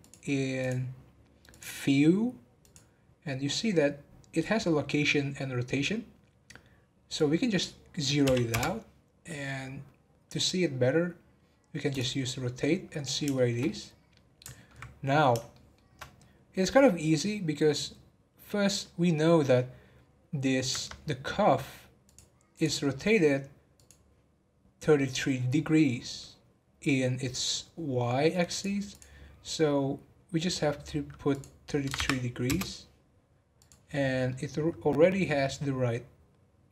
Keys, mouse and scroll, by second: 2.6-5.7 drag, 7.1-10.2 drag, 11.9 click, 12.6-15.0 middle drag, 15.0-15.5 scroll up 1, 15.5-18.6 shift+middle drag, 22.0 click, 22.5 click, 22.9 scroll down 4, 23.7 click, 27.2 scroll down 1, 27.5-28.5 scroll up 2, 28.5 click, 28.9 click, 29.2 scroll up 1, 31.3 click, 31.9 3, 33.5 click, 34.0 scroll down 1, 34.3-36.7 middle drag.